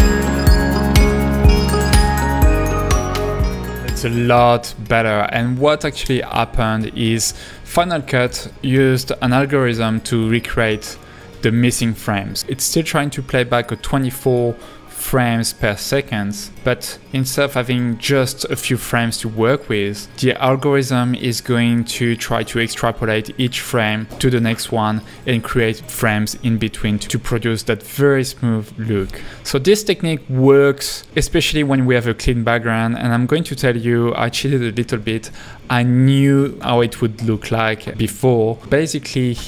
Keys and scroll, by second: 6.9 h, 9.4 space, 20.1 h, 26.4 space, 29.6 space, 35.1 h, 37.7 h.